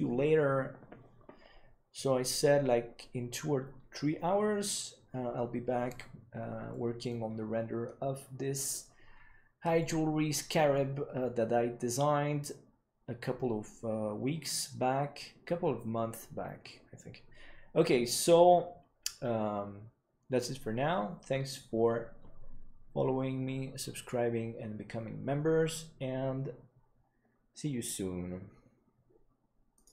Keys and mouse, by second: 6.6-7.0 middle drag, 9.7-10.7 middle drag.